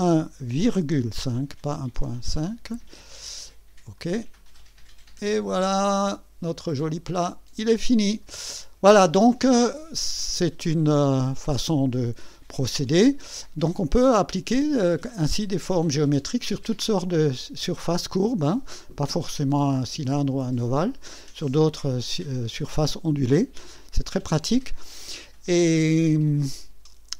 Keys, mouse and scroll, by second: 0.0 KP_1, 0.7 ,, 1.9 KP_5, 3.9 click, 5.3 click, 5.8-8.4 drag, 8.5 scroll up 2, 9.1 right click, 10.2 scroll down 1, 10.7-12.5 drag, 12.6-13.4 right drag.